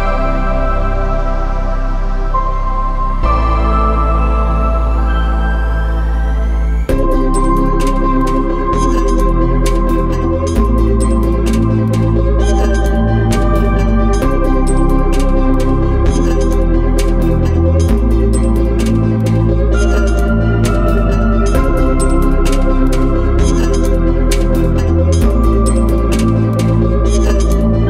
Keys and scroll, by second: 4.4 ctrl+alt+z, 12.0 ctrl+alt+z, 18.0 ctrl+alt+z, 20.0 ctrl+alt+z.